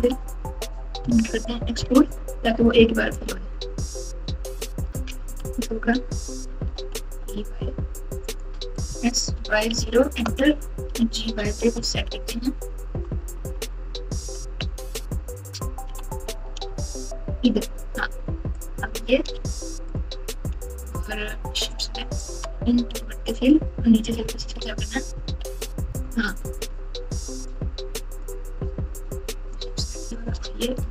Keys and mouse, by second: 0.0 ctrl+z, 1.0 ctrl+z, 1.8 alt+z, 3.1 click, 3.3-5.3 drag, 5.3 alt+z, 6.6 e, 10.1 s, 10.8 g, 16.6 Tab, 17.5 Tab, 18.5 click, 21.7 shift+click, 22.9 f, 24.0-25.2 typing, 28.2 click, 30.7 f.